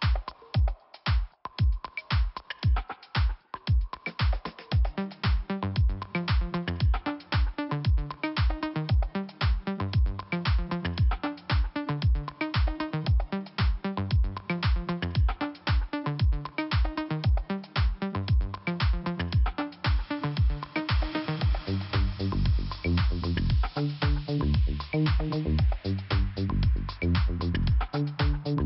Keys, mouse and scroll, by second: 1.4 click, 5.4 click, 7.0 click, 10.2 click, 11.7 click, 13.1 click, 15.9 click, 16.5 click, 17.4 click, 19.7 click, 22.6 click, 23.5 click, 24.2 click, 24.6 scroll down 1, 25.8 click, 27.6 click, 27.7 click, 28.4 click.